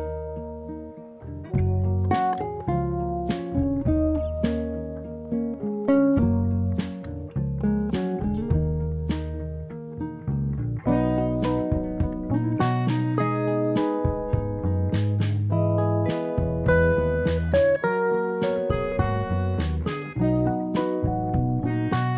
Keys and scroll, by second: 2.3 space, 6.1 ctrl+=, 10.7 space, 13.1 ctrl+-, 16.2 ctrl+a, 17.2 9, 17.5 0.